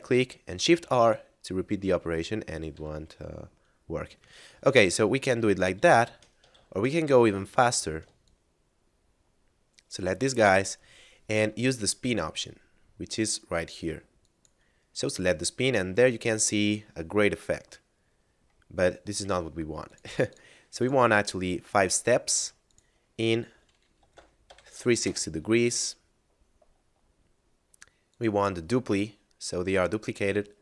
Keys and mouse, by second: 0.6 shift+r, 2.7 r, 4.2 right click, 4.4 ctrl+z, 4.8 ctrl+z, 5.1 ctrl+z, 5.6 ctrl+z, 6.6 ctrl+z, 7.0 a, 8.2 ctrl+click, 12.3 middle click, 14.2 click, 18.8 middle click, 19.9 click, 24.0 3, 25.1 Return, 27.1 middle click, 27.9 click, 29.4 middle click.